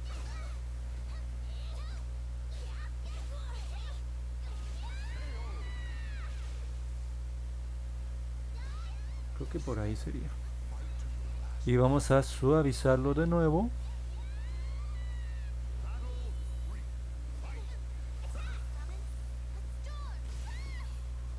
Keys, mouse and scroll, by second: 0.9 click, 3.2 ctrl+z, 5.1 click, 5.5 ctrl+z, 6.6 click, 7.8 click.